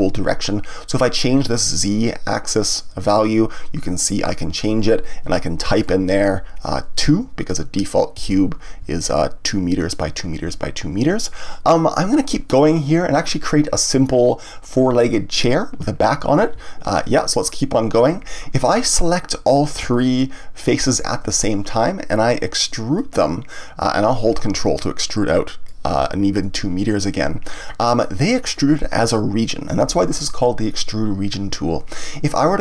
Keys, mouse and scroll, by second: 2.6-5.6 drag, 5.8-8.3 drag, 8.3 KP_Enter, 17.0-18.9 scroll down 1, 18.9 click, 19.9 shift+click, 20.7 shift+click, 22.9-26.0 drag, 27.6-30.6 middle drag.